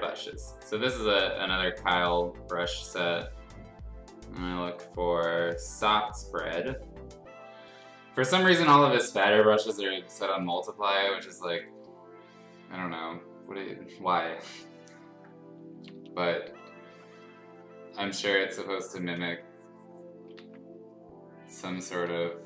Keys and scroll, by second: 15.7-16.6 typing, 20.3 ctrl+z, 22.0 6.